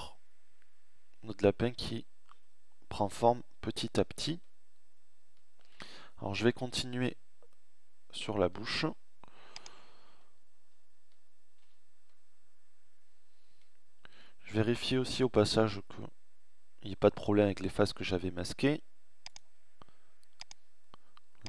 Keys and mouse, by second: 4.9 Tab, 10.8 a, 15.0-17.0 middle drag.